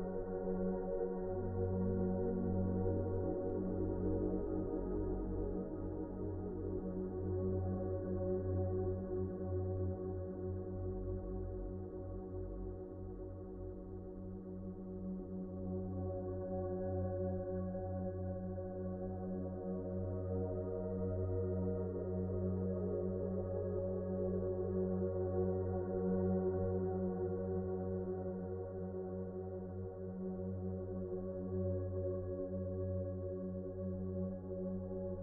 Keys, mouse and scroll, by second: 0.6 shift+r, 1.4 shift+r, 3.0 s, 5.4 F4, 5.5 F4, 5.8 F4, 6.0 s, 7.3 s, 10.0 s, 12.3 s, 12.9 1, 15.6 a, 17.7 s, 21.0 s, 22.3 F4, 23.6 F4, 23.9 s, 24.8 a, 27.3 s, 33.6 ctrl+z, 33.8 ctrl+z, 34.1 ctrl+z, 35.0 F4.